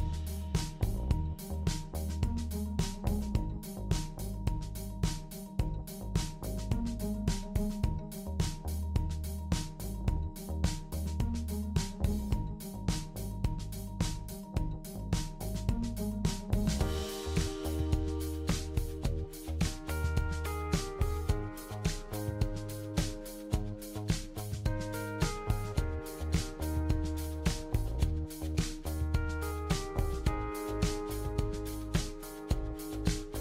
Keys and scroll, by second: 12.3-13.5 typing, 15.7 typing.